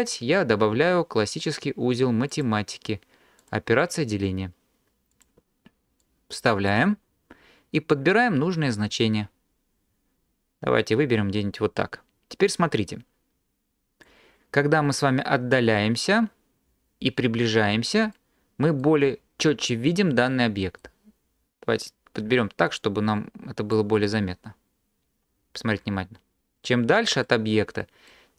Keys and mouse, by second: 3.4 click, 4.0-5.3 drag, 6.1 drag, 8.0-14.2 drag, 22.0-23.8 drag.